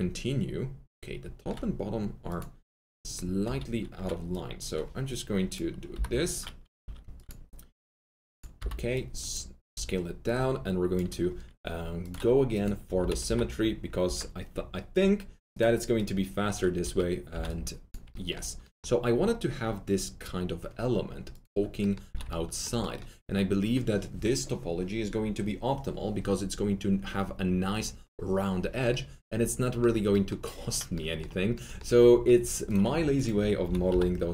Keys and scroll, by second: 3.4 4, 5.9 Delete, 6.7 3, 8.5 shift+r, 13.2 y, 14.0 Return, 33.6 s, 33.8 y, 34.2 Return.